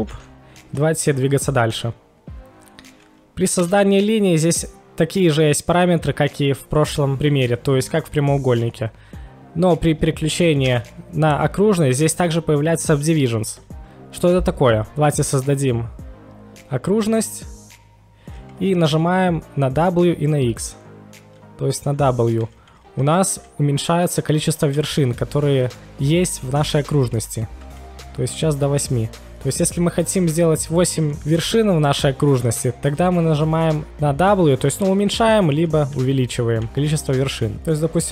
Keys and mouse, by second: 0.1 ctrl+shift+x.